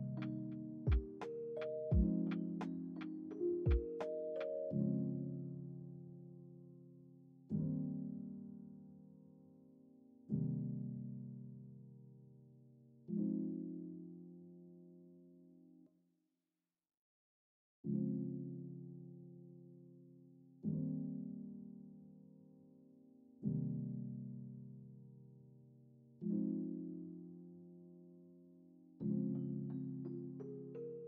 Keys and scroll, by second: 4.0 ctrl+s, 9.9 ctrl+c, 12.2 ctrl+v, 20.4 ctrl+s.